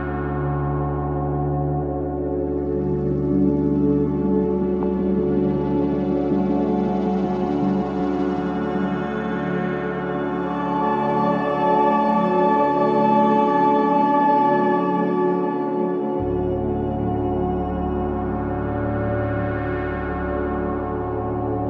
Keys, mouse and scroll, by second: 0.0 middle click, 0.7 click, 1.8 KP_7, 2.5 g, 5.3 scroll down 1, 5.4 Tab, 5.7-6.2 middle drag, 6.2 drag, 6.3-6.7 scroll down 1, 6.7-7.0 shift+middle drag, 7.0 scroll down 1, 7.1-8.6 middle drag, 8.6 KP_1, 9.0 shift+middle click, 9.4-11.0 scroll up 1, 11.8-12.2 scroll up 1, 12.2-13.7 scroll down 1, 14.2-16.7 shift+middle drag, 16.7 click, 17.8 click, 18.7 click, 19.4 click, 19.6-21.6 drag.